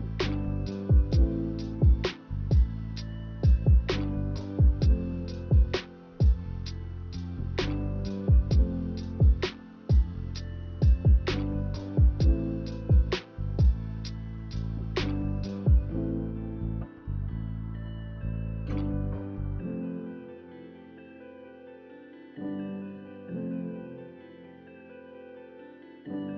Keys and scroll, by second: 0.0-0.6 typing, 7.7 z, 12.1 k, 23.6-24.5 typing.